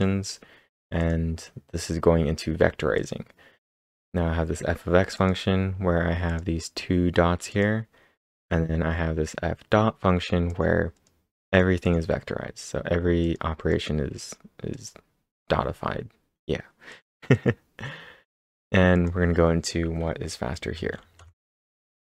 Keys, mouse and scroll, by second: 0.0-0.4 typing, 1.0 click, 1.8 click, 3.0 click, 5.2 click, 6.3 click, 7.5 click, 8.2 click, 10.5 click, 11.5 click, 13.2 click, 13.6 click, 16.9 click, 17.3 click, 18.9 click, 20.8 ctrl+`, 21.2 Up.